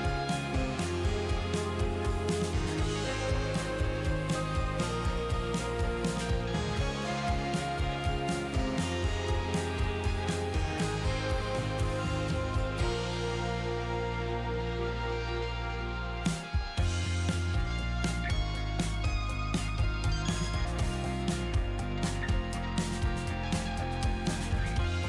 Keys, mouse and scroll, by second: 17.9-25.0 drag.